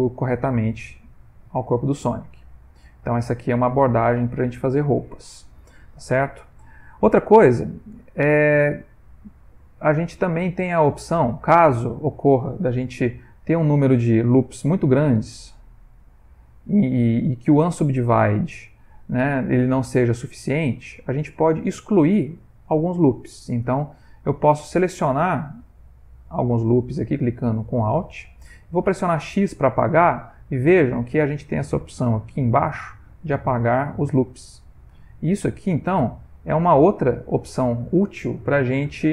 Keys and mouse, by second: 1.4 click, 2.2 x, 3.1 click, 3.6 x, 4.8 middle click, 8.6 click, 9.3 Tab, 9.7 ctrl+middle click, 10.2-11.1 shift+middle click, 10.9 ctrl+middle click, 11.2 shift+middle click, 11.8 ctrl+middle click, 13.4 ctrl+r, 18.4 ctrl+middle click, 18.9 middle click, 19.3 a, 19.7 middle click, 21.3 ctrl+middle click, 22.1 middle click, 22.5 ctrl+middle click, 23.0 middle click, 23.8 alt+click, 25.1 alt+shift+click, 26.5 alt+shift+click, 28.0 alt+shift+click, 28.0 middle click, 28.3 middle click, 28.9 x, 35.3 alt+click, 36.7 alt+shift+click, 38.8 x.